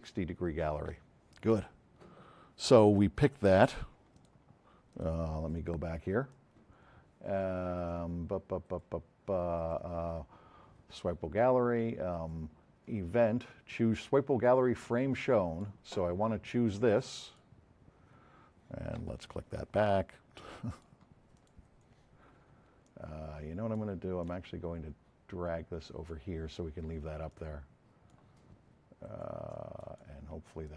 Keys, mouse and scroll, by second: 4.2 click, 4.9 click, 6.3-6.6 drag, 13.6 F7, 15.2-15.7 drag, 25.8 click, 29.5-30.1 drag.